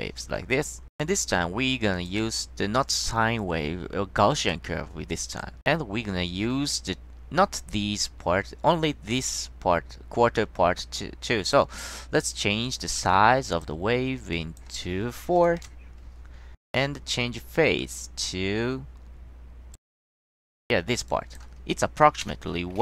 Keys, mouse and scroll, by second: 2.1 click, 3.0 click, 4.4 click, 5.2 click, 5.9 middle click, 11.6 click, 12.8-13.8 drag, 14.5 drag, 15.4 2, 15.7 Return, 18.1-19.9 drag, 20.5 click, 21.2 drag.